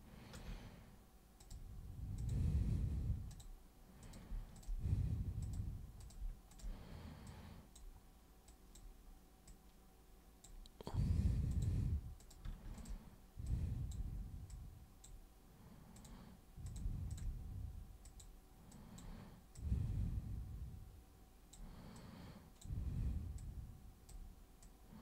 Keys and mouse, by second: 1.4 click, 2.1 super+click, 3.3 super+click, 4.0 super+click, 4.5 shift+super+click, 5.4 super+click, 6.0 super+click, 6.5 shift+super+click, 7.2 click, 8.5 click, 9.5 click, 11.5 click, 12.1 click, 12.7 shift+click, 13.4 click, 14.5 super+click, 15.9 super+click, 16.6 super+click, 17.1 shift+super+click, 18.0 super+click, 18.7 super+click, 19.5-21.5 super+drag, 21.9 super+click, 23.4 super+click, 24.6 super+click.